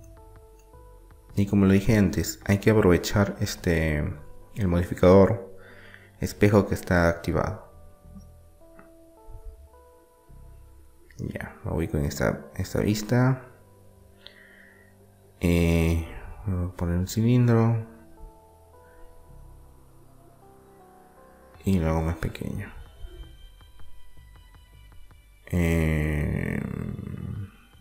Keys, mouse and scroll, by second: 3.6-5.3 middle drag, 7.9 KP_3, 9.3 KP_1, 11.3-13.0 drag, 13.3 shift+a, 17.3 s, 22.7-25.7 middle drag, 25.7 Tab.